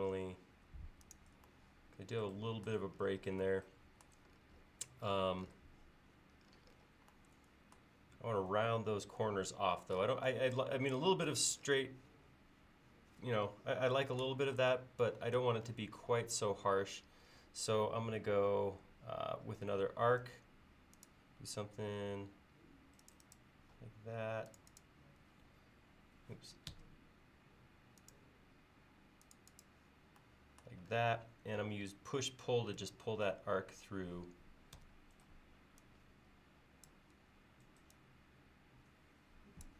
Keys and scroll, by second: 20.3 a, 26.7 Escape, 32.8 p, 34.8 Escape.